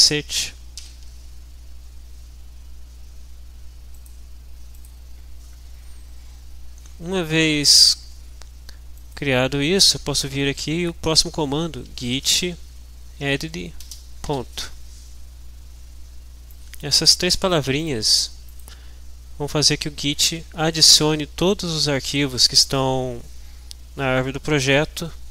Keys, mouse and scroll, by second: 0.8 ctrl+h, 3.9 click, 4.7 click, 9.2 click, 11.6-14.2 typing, 16.5-17.7 drag, 17.8 click.